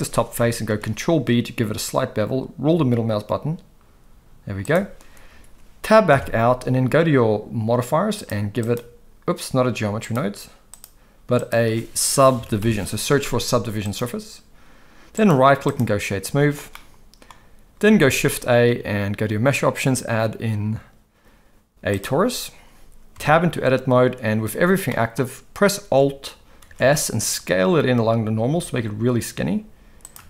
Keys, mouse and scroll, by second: 0.7 ctrl+b, 6.1 Tab, 8.3 click, 10.1 click, 10.8-14.0 drag, 15.3-15.8 right drag, 16.7-17.3 middle drag, 18.0 shift+a, 23.1 Tab, 24.9 middle click, 26.6 alt+s.